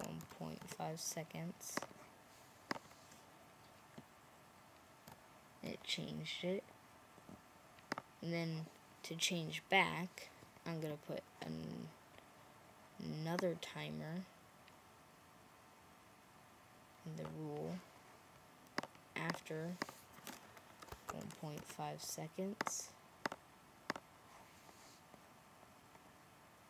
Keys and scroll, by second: 0.0-1.0 typing, 20.5-22.0 typing.